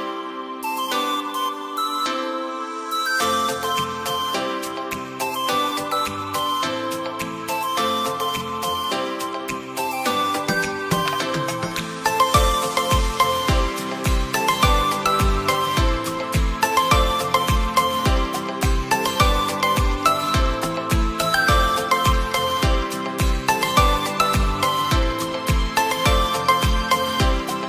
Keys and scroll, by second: 4.4 ctrl+shift+q.